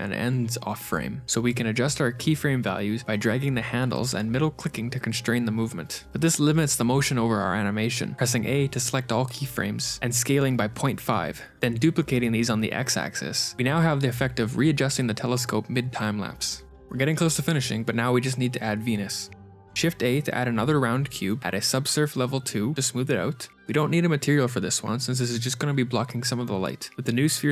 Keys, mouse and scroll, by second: 2.7 shift+right click, 5.1 ctrl+z, 5.5 ctrl+z, 9.9 click, 9.9-12.0 typing, 15.5 shift+space, 17.8 shift+right click, 17.8 shift+space, 19.7 middle click, 20.0 a, 21.2 ctrl+2, 21.6 right click, 23.1 g.